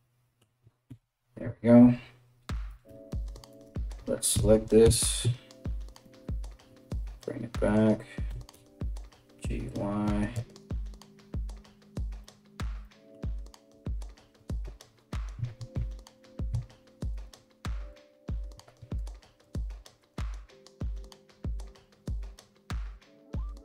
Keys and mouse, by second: 0.5 KP_3, 2.5 3, 3.3-16.7 alt+middle drag, 3.9 s, 7.9 g, 13.9 KP_3, 15.1 ctrl+KP_1, 16.1 1, 16.7 right click, 16.8-19.0 middle drag, 17.5 g, 19.0 right click, 19.2 middle click, 19.2 g, 20.2 right click, 20.2-23.6 middle drag, 20.2 g, 20.4 right click, 20.4 g, 21.3 right click, 21.5-23.6 typing, 21.8 right click, 22.9 right click, 23.4 shift+right click.